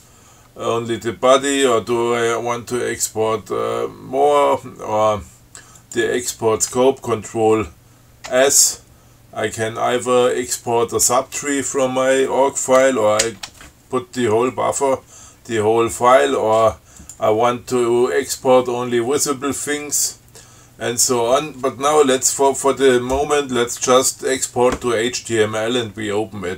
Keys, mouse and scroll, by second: 6.1 click, 8.6 ctrl+s, 13.5 ctrl+s, 17.3 click.